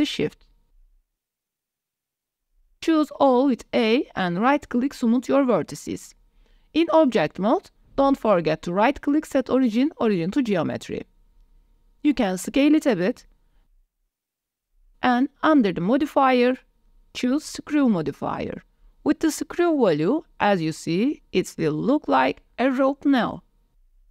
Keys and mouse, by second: 0.4 m, 1.4 click, 1.6 shift+click, 2.2 m, 3.2 a, 3.6-5.7 drag, 7.1 middle click, 7.6 Tab, 8.2 shift+middle drag, 9.7 middle click, 10.5-12.2 drag, 12.6 shift+click, 12.9 click, 13.5 ctrl+s, 14.4 s, 15.8-18.2 drag, 18.7-19.1 drag, 20.1-24.1 drag.